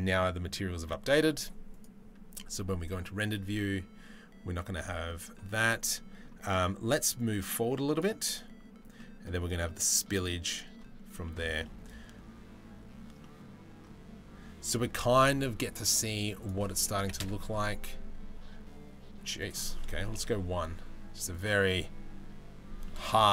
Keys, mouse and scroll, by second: 5.6 middle click, 7.0 middle click, 8.6 middle drag, 9.2 middle click, 10.8 shift+middle click, 11.3 middle click, 12.8 middle click, 16.1 middle click, 19.0 middle click, 22.4 middle click.